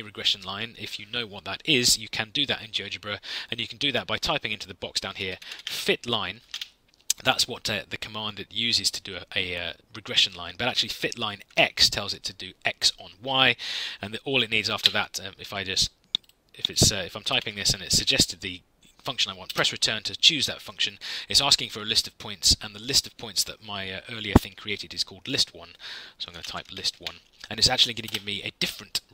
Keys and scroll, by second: 4.9-7.0 typing, 11.4 x, 14.7 Tab, 17.2 BackSpace, 17.8 x, 19.4 Return, 26.0-27.4 typing, 28.0 Return.